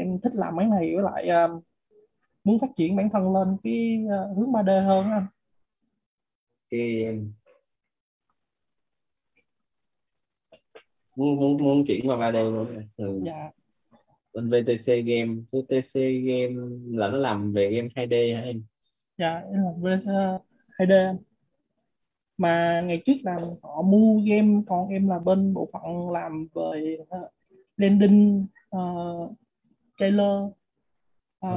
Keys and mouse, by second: 0.7-6.7 typing, 6.9 Return, 8.9 click, 11.4 click, 23.3-28.6 typing.